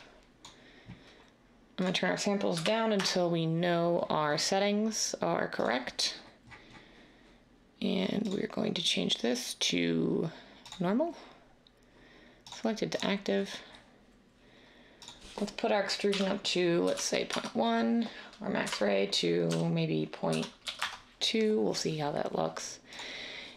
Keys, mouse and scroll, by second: 2.5 1, 3.0 Return, 16.1-16.9 typing, 17.3 Tab, 18.4-20.8 typing.